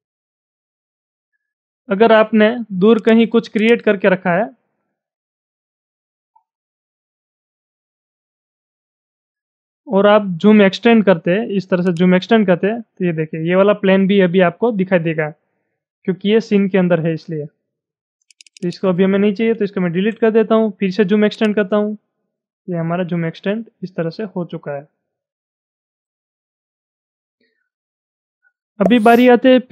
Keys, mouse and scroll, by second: 0.1 scroll down 2, 0.5-2.6 middle drag, 2.6 r, 3.0 click, 3.6 click, 4.2 shift+middle click, 5.0 shift+middle click, 5.6 scroll up 6, 6.1 scroll down 1, 6.3 middle click, 7.5-8.2 scroll up 10, 8.2 middle click, 8.9 shift+middle click, 9.4 scroll up 2, 9.8-11.9 middle drag, 11.9 click, 18.0 space, 18.3 click, 18.5 double click, 18.6 click, 21.3 click, 25.5-26.3 scroll up 9, 26.7-27.3 scroll up 8.